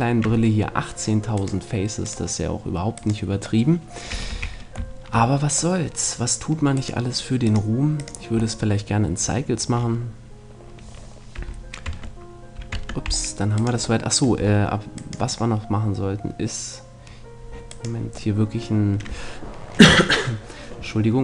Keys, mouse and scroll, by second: 3.6 middle click, 4.3 a, 4.6-6.3 middle drag, 6.8-8.6 right drag, 7.4-9.2 drag, 8.4 middle click, 9.2-10.2 middle drag, 11.4 a, 11.9 Tab, 12.8 Tab, 13.1-16.2 middle drag, 16.2 right click, 17.8 right click, 18.4-19.4 middle drag, 19.7 middle click.